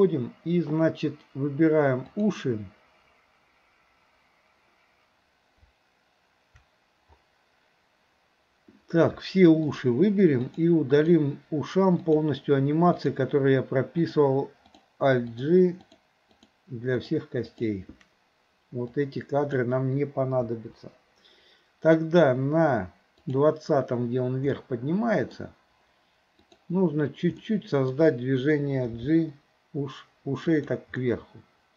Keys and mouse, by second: 2.2 click, 9.6 shift+click, 11.0 shift+click, 12.0 shift+click, 12.9 shift+click, 14.0 shift+click, 15.3 shift+click, 15.8 shift+click, 16.4 shift+click, 17.0 shift+click, 17.5 shift+click, 18.9-19.6 drag, 20.5 Delete, 23.3 click, 24.6-25.3 middle drag, 26.4 click, 27.5 middle click, 29.0 g, 31.0-31.7 middle drag.